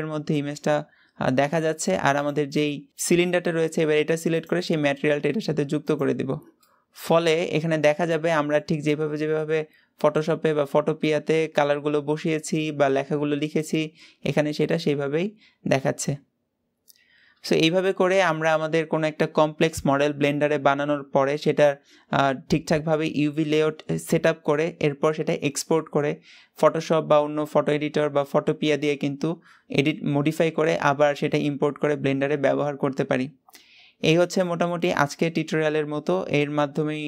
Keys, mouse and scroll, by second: 2.1 click, 2.4-5.8 middle drag, 5.8 click, 6.5-8.7 middle drag, 8.7 scroll up 1, 9.0-12.0 middle drag, 17.7-37.0 shift+middle drag.